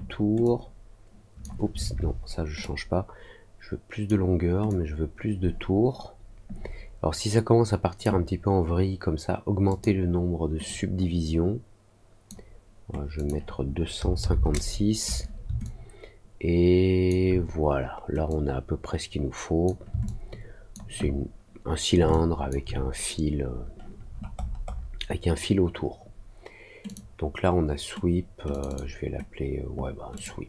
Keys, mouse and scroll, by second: 0.4-1.4 drag, 2.5-4.0 drag, 4.6-8.0 drag, 9.6 click, 10.6-12.2 drag, 13.1 click, 15.6-17.0 alt+drag, 18.2-19.6 drag, 20.0 alt+click, 22.0 alt+click, 24.0 middle click, 24.3 middle click, 24.6 middle click, 26.8 click, 28.4 click, 28.6 click, 30.1 click.